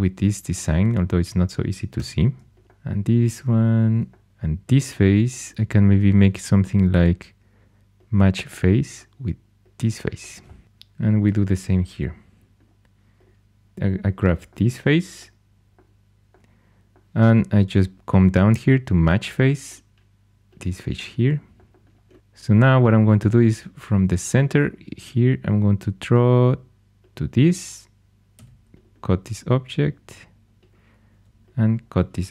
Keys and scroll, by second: 1.9 3, 4.3 shift+super+e, 28.3 c, 31.0 c.